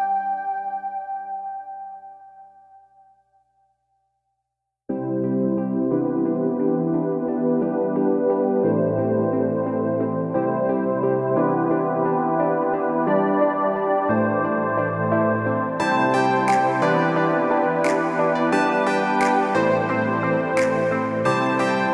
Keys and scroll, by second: 21.6 ctrl+alt+shift+e.